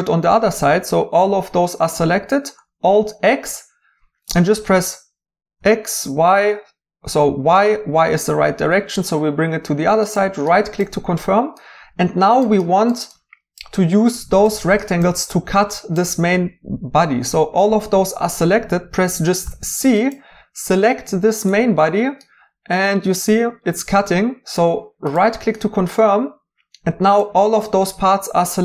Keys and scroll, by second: 4.7 alt+x, 5.5 typing, 19.5 c.